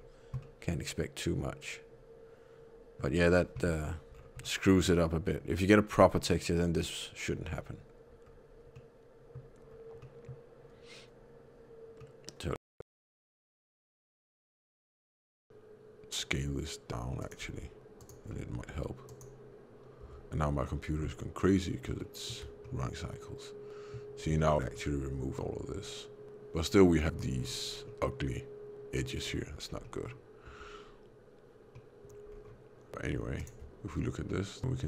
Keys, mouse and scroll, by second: 0.3 middle click, 3.7 scroll down 1, 4.3 middle click, 4.3-5.5 scroll down 5, 7.3 Tab, 8.2 scroll down 2, 8.6 middle click, 9.6 scroll down 1, 9.9 middle click, 11.9 middle click, 13.1 middle click, 14.1 s, 18.2 middle click, 18.5 s, 20.0 Tab, 21.5 middle click, 21.9 shift+middle click, 22.5 middle click, 24.2 shift+middle click, 24.7 middle click, 25.5 Tab, 26.9 middle click, 27.6 scroll up 5, 27.8 middle click, 29.1 scroll down 1, 29.8 middle click, 29.8 scroll down 4, 30.4 Tab, 31.6 middle click, 32.2 scroll down 1, 33.3 ctrl+shift+click, 33.8 scroll down 3, 34.2 middle click.